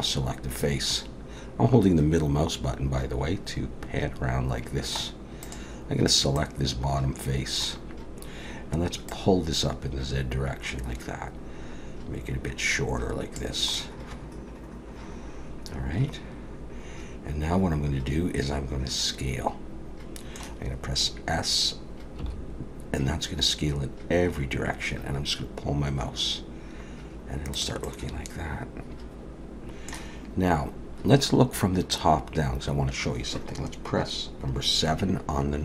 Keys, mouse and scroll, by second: 5.4 click, 6.4 middle click, 9.1 click, 13.7 middle click, 22.2 s, 27.8 middle click.